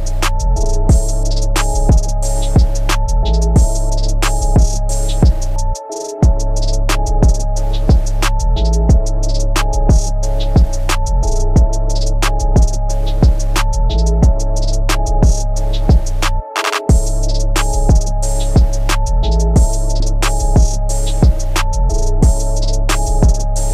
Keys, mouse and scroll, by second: 0.0 click, 0.8 scroll down 1, 1.0 middle click, 3.0 ctrl+c, 3.5 Up, 4.5 Down, 5.1 Right, 5.3 Right, 5.5 Right, 7.3 1, 8.1 Left, 8.9 Down, 10.1 scroll up 3, 10.4 middle click, 11.0 shift+middle click, 11.4 middle click, 11.9 middle click, 12.5 scroll down 1, 14.4 click, 15.3 Escape, 16.4 click, 20.9 click, 22.4 ctrl+c.